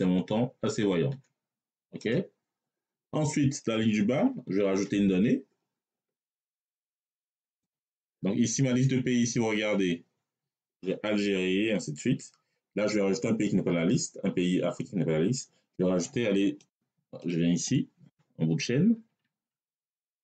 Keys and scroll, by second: 1.8 Return, 4.4 ctrl+Down, 18.4 Tab.